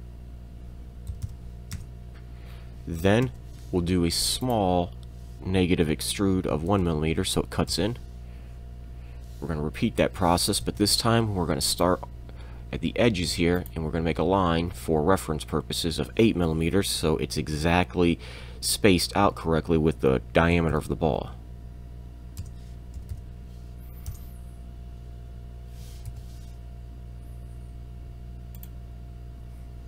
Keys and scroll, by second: 1.1 2, 1.3 m, 1.8 Return, 3.2 e, 6.5 1, 6.7 m, 7.7 Return, 10.6 l, 19.2 8, 20.5 m, 22.4 Return, 22.7 Tab, 22.7 2, 22.7 4, 22.7 m, 23.0 m, 24.1 Return, 26.1 l.